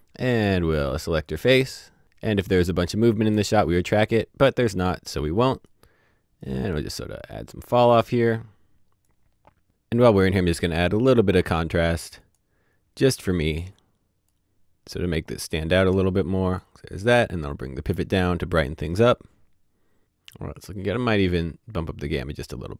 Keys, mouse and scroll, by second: 8.4-9.6 scroll up 1, 9.6 click, 11.9 click, 13.4 click, 21.8 click, 22.5-22.7 scroll up 1.